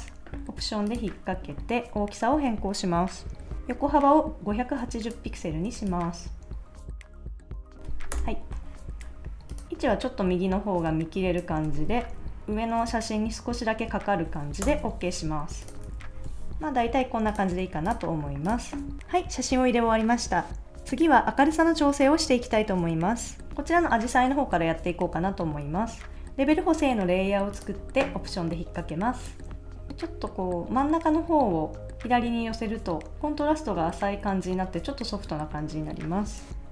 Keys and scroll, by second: 8.1 shift+Return, 12.2 shift+Up, 14.6 Return, 15.9 super+s, 16.3 super+s, 17.6 super+s.